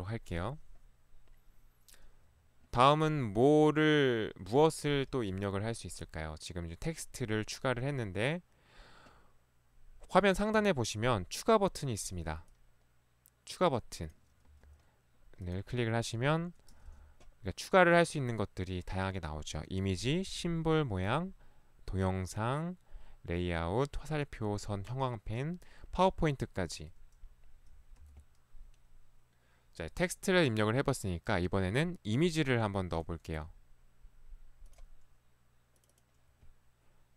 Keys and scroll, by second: 14.6 ctrl+Escape, 14.6 ctrl+1, 16.8 ctrl+1, 27.6 `, 28.0 Escape, 28.2 ctrl+1.